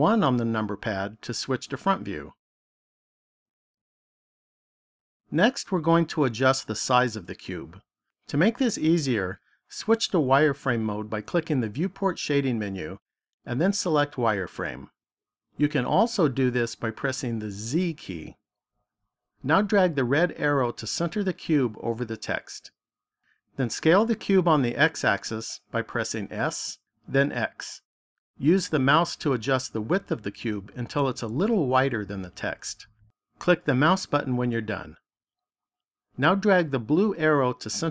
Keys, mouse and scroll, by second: 2.7-3.4 scroll up 2, 4.2 shift+middle click, 11.6 click, 20.2 click, 26.4 s, 33.7 click, 37.8 click.